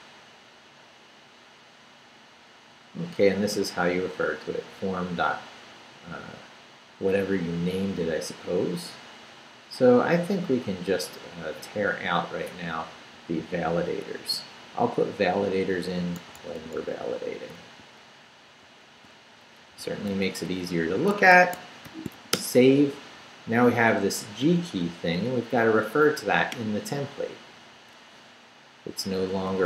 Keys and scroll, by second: 13.1 Right, 14.2 x, 16.2 x, 19.2 Left, 19.7 Left, 19.7 x, 21.1 Escape, 21.6 shift+Escape, 21.8 shift+;, 22.1 shift+w, 22.3 Return, 28.9 Left.